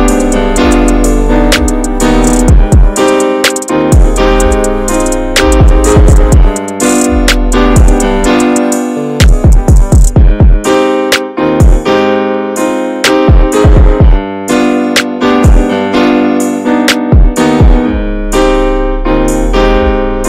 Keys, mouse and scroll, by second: 0.2 e, 0.5 alt+s, 2.7 middle click, 3.1 2, 3.3 click, 4.3 alt+shift+click, 4.6 middle click, 5.2 s, 6.2 middle click, 6.5 ctrl+b, 7.8 middle click, 8.1 scroll down 4, 8.3 Tab, 8.4 click, 8.8-9.2 middle drag, 9.2-9.7 scroll up 4, 9.7 ctrl+z, 9.9 ctrl+z, 10.3 shift+middle click, 10.4 scroll up 1, 10.6 ctrl+z, 10.8 shift+middle click, 11.4 s, 12.4-13.4 middle drag, 13.4 ctrl+b, 15.8 Tab, 16.0 scroll down 1, 16.2 alt+middle click, 16.9 Tab, 17.2 alt+z, 17.5 scroll up 1, 17.7-19.6 drag, 19.6 ctrl+z, 20.2 1.